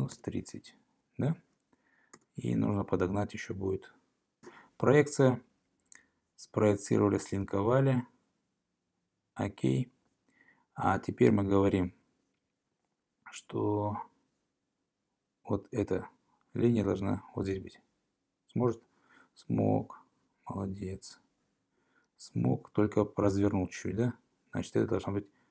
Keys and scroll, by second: 0.2 0, 2.2 Return, 5.8 p, 22.5 ↺.